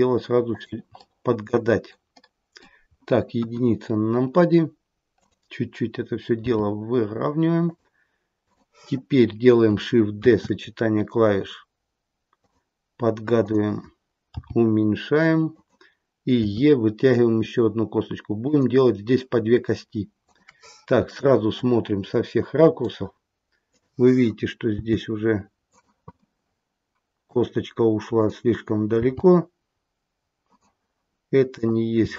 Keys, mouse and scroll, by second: 0.9 middle click, 2.1 middle click, 3.3 KP_1, 3.8-5.0 scroll down 1, 5.1 click, 6.3 g, 8.4 click, 10.1 shift+d, 13.3 click, 14.3 g, 16.4 e, 20.2 click, 20.9 shift+click, 21.5 middle click, 23.6 click, 24.7 g, 26.1 middle click, 28.1 click, 28.8 g, 31.4 click, 31.9 g.